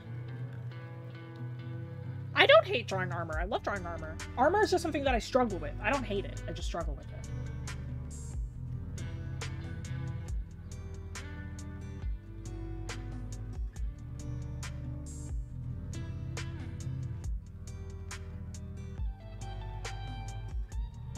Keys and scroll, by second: 10.2 scroll up 1, 18.1 scroll.